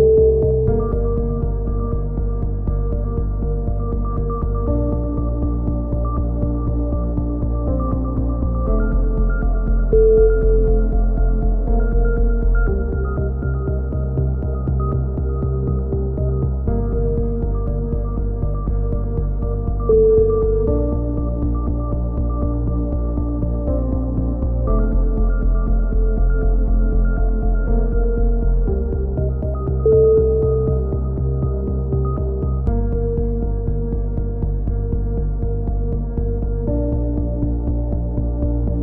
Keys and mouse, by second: 0.0-1.7 drag, 0.0-2.5 typing, 2.7 Tab, 3.7 Tab, 7.1-9.1 middle drag, 9.1 KP_1, 9.2 z, 9.5 middle click, 12.0 KP_3, 13.7 KP_1, 14.1 z, 14.5-16.0 drag, 14.5 a, 16.0 KP_1, 17.9-19.3 drag, 19.2 a, 19.3 z, 19.5 z, 19.7-20.3 drag, 20.5-21.1 drag, 22.0 KP_3, 22.2 z, 22.5 z, 23.0-23.9 right drag, 26.4 a, 27.0 KP_7, 27.7 z, 30.1 ctrl+z, 30.7-32.9 drag, 35.5 a, 35.7 z, 35.7-36.6 drag, 37.5 ctrl+KP_7, 38.6 middle click, 38.7-38.8 drag.